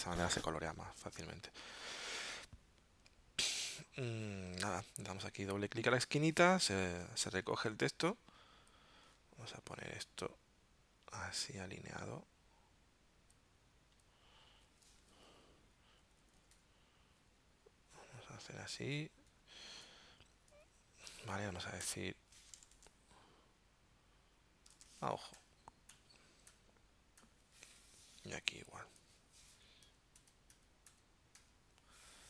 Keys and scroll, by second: 15.2 shift+Right, 16.0 shift+Down, 17.3 shift+Left, 18.2 Down, 18.7 Right, 18.9 Down, 19.3 Left, 19.8 Down, 21.8 shift+Up, 22.7 super+Tab, 24.7 super+Tab, 25.4 shift+Up, 26.5 shift+Up, 27.2 shift+Up, 29.8 shift+Down.